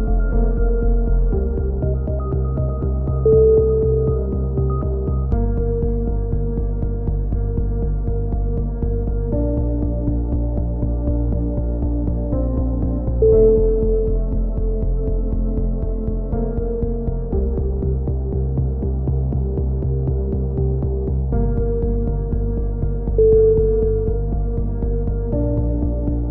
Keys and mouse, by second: 0.0 ctrl+r, 1.6 a, 1.7 c, 2.6 click, 3.2 right click, 4.4 click, 9.8 a, 10.4 click, 12.7 c, 14.2 right click, 14.6 click, 17.2 a, 18.7 ctrl+r, 20.8 a, 21.2 click, 21.7 c, 22.6 click, 23.0 middle click, 23.5 click, 24.9 a, 25.4 click.